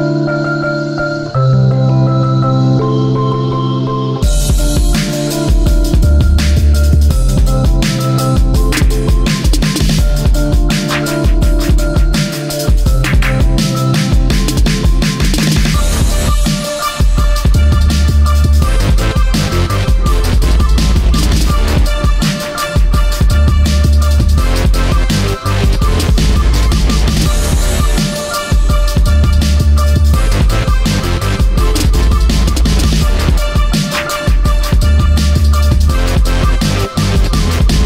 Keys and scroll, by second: 5.1 i, 6.1 ctrl+z.